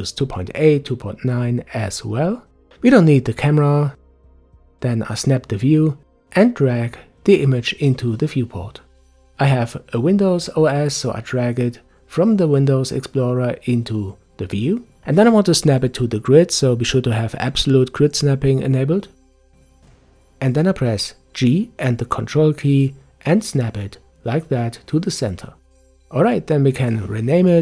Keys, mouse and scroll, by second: 4.1-5.4 drag, 5.4 Delete, 6.9-9.9 middle drag, 15.9-19.1 drag, 21.3 g, 26.8-27.6 drag.